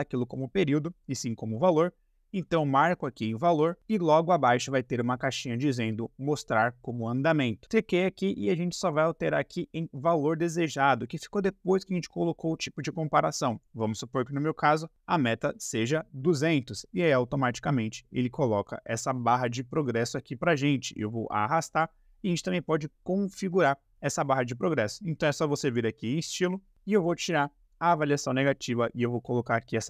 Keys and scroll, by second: 0.6 Escape, 14.6 2, 14.8 0.